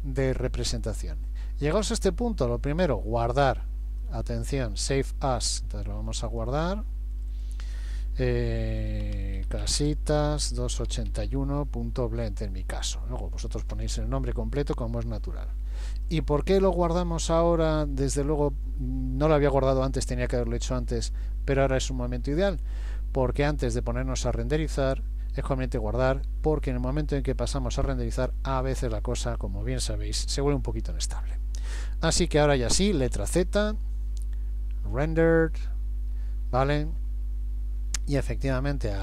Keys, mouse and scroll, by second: 2.7 click, 33.1 z.